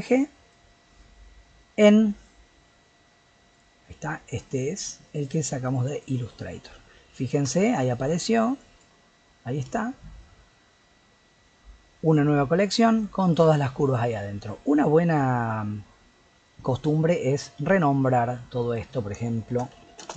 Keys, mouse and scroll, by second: 6.6-7.3 middle drag, 7.3 scroll down 1, 7.5-8.6 shift+middle drag, 8.6 click, 9.8-11.3 middle drag, 11.3-12.0 scroll down 2, 12.0 click, 13.0 click, 13.2 click, 13.5 click, 13.8 click, 16.6 click, 18.5 click, 18.7-20.1 drag.